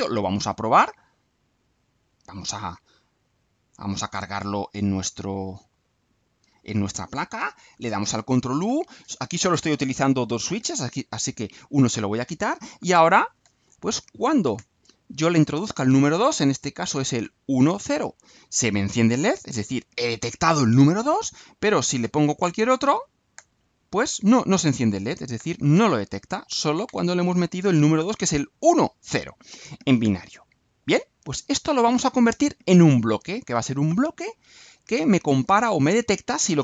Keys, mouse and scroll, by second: 1.7 click, 3.2 middle click, 4.1-5.2 right drag, 5.7 right click, 7.7 ctrl+u.